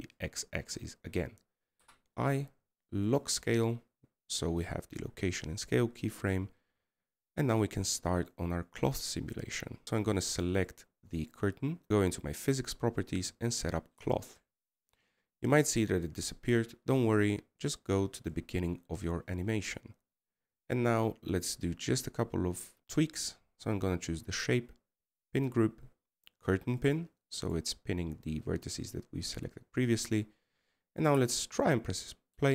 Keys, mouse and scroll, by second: 3.5-4.5 scroll up 1, 8.6-9.8 scroll down 2, 15.3 middle click, 16.5 scroll up 3, 21.4-23.7 scroll down 13, 25.0 scroll down 4.